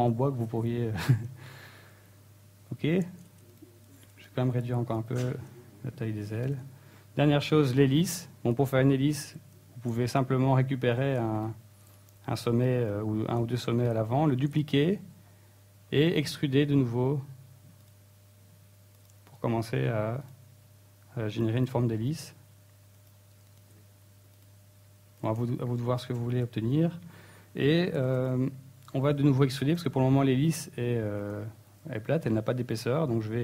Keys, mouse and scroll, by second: 0.5 scroll down 2, 0.6 middle click, 2.2 middle click, 3.5 ctrl+Tab, 4.2 b, 4.8 s, 6.8 click, 7.0 Tab, 7.1 middle click, 7.7 scroll up 4, 8.7 KP_1, 9.3 scroll up 2, 9.6 Tab, 10.0-10.5 scroll up 1, 10.5-10.9 scroll up 3, 10.9 shift+middle click, 11.4 right click, 12.6 shift+right click, 14.8 shift+d, 16.2 click, 16.4-16.7 scroll down 2, 16.8 e, 18.0 click, 18.2 s, 19.2 click, 19.3 shift+middle click, 19.5 e, 20.1 click, 20.2 s, 21.1 click, 21.6 alt+right click, 22.1 s, 22.7 click, 23.1 alt+right click, 23.5 e, 24.0 click, 24.1 s, 24.8 click, 25.2 scroll down 2, 25.4 middle click, 25.9 shift+middle click, 26.4-26.8 scroll up 1, 27.3 ctrl+l, 28.2 shift+middle click, 28.7 middle click, 29.1 shift+scroll down 1, 29.2 shift+middle click, 29.9 middle click, 30.4 shift+middle click, 31.2 scroll up 2, 31.6 shift+middle click, 32.0 e, 32.8 click, 33.2-33.4 scroll down 7.